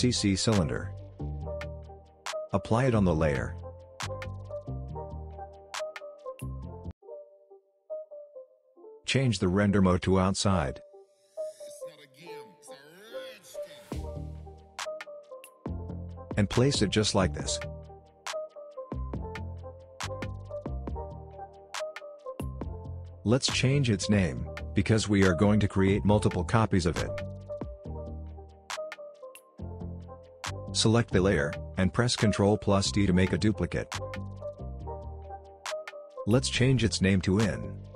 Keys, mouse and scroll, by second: 0.3 space, 0.7 c, 2.3-4.3 drag, 5.0-5.4 scroll down 1, 5.4-6.0 scroll up 1, 6.0-6.4 scroll down 1, 6.4 space, 6.5-7.4 click, 6.9 space, 10.3 click, 14.1-15.1 drag, 24.5 right click, 25.2 click, 26.3-28.3 typing, 29.6 click, 32.4 ctrl+d, 33.5 click, 33.8 right click, 34.3 click.